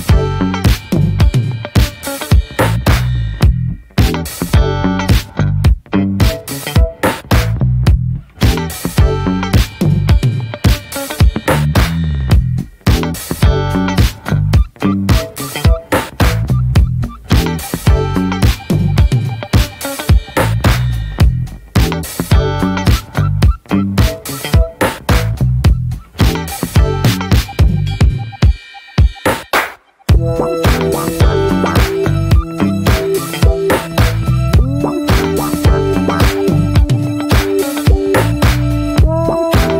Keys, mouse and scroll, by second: 0.5-3.0 middle drag, 3.0-3.8 scroll up 4, 3.2 shift+middle drag, 3.8 middle click, 4.5-5.0 scroll down 1, 5.0-6.3 middle drag, 6.3 click, 6.8-9.5 middle drag, 9.5 click, 10.6 scroll down 2, 10.8 middle click, 11.0-11.8 scroll up 1, 11.8-13.7 drag, 13.7 Tab, 13.8 middle click, 14.5 alt+z, 14.9 Tab, 15.0 click, 15.9 alt+z, 16.2 click, 16.5 click, 16.8 scroll down 2, 17.0-17.4 middle drag, 17.4 click, 17.6-18.5 right drag, 18.5-19.0 middle drag, 20.4 click, 21.2 click, 21.6 r, 23.8 alt+middle click, 24.3 ctrl+a, 25.2 alt+middle click, 25.5-26.6 scroll up 1, 26.6-27.5 drag, 28.8 alt+middle click, 29.2 ctrl+a, 29.9 middle click, 30.4 ctrl+s, 30.7 shift+middle click, 31.0 scroll down 2, 31.2-33.2 middle drag, 33.2 ctrl+s, 33.4 drag, 33.6 drag, 34.0-34.3 scroll up 1, 34.3-36.1 middle drag, 36.1 click, 37.8-39.7 drag.